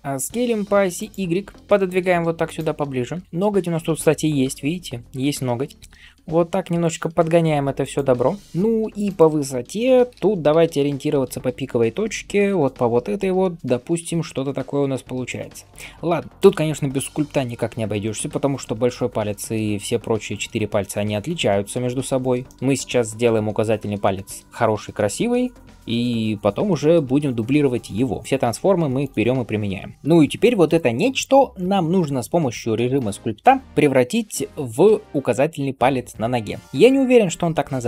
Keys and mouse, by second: 1.6 g, 4.7 r, 5.7 s, 8.9 shift+right click, 9.0-36.6 shift+middle drag, 10.0 s, 28.2 ctrl+a, 32.8-36.6 drag, 37.5 right click, 37.5 s.